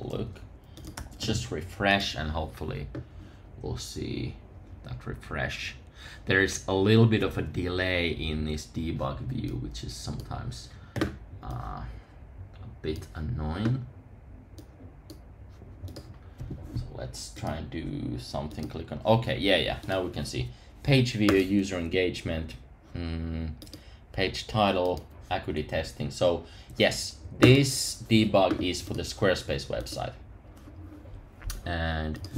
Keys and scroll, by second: 0.9 super+r.